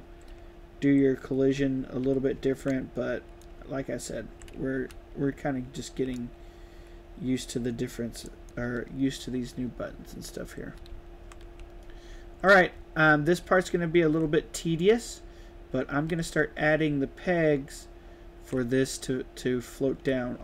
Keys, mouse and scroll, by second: 0.0-0.2 typing, 1.3-5.2 typing, 3.7 right click, 3.9 right click, 4.5 right click, 4.7 right click, 4.9-6.1 right drag, 7.7-8.2 drag, 8.4-10.2 right drag, 8.5 d, 10.5-14.2 typing, 16.6 q, 18.6 e.